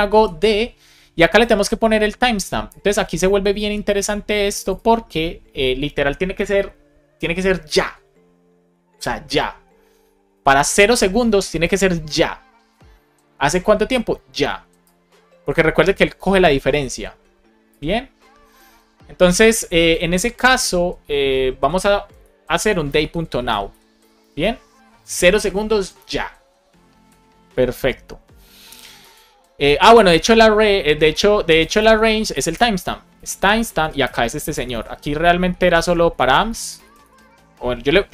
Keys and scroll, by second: 0.0 shift+9, 22.5 shift+d, 23.7-24.5 typing, 29.8 Tab, 31.8 space, 33.7 space, 34.4 BackSpace, 35.4 Down, 36.1 super+Right, 36.4 Left.